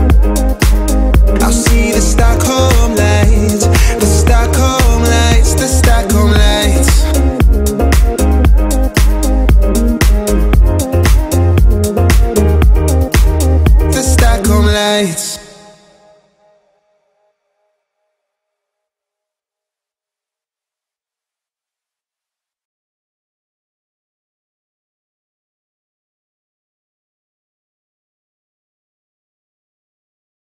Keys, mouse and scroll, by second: 0.0 shift+middle click, 0.2 scroll up 1, 0.6 shift+middle click, 1.1 scroll down 1, 1.4-5.0 shift+middle drag, 5.0 click, 5.4-5.7 scroll up 1, 5.7 shift+middle click, 6.4 click, 7.9 ctrl+x, 8.5-9.3 scroll up 1, 9.3 p, 9.5 click, 10.6-11.5 typing, 11.2 Return, 11.7 click, 14.0 right click, 14.7 click, 15.6 shift+middle click, 16.1-16.8 scroll down 1, 16.8 f, 17.2 click, 18.0-19.1 typing, 18.7 Return, 19.9 click, 20.9-22.5 scroll up 1, 22.5 m, 23.2 ctrl+click, 24.5 Right, 26.2 click, 26.7-27.7 typing, 28.2-29.5 drag, 29.5 m, 30.2 ctrl+click.